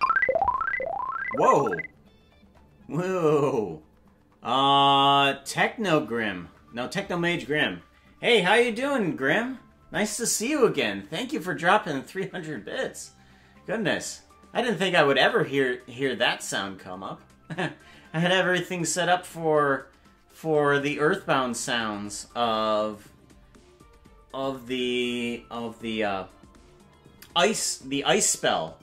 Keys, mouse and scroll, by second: 1.4 ctrl+s.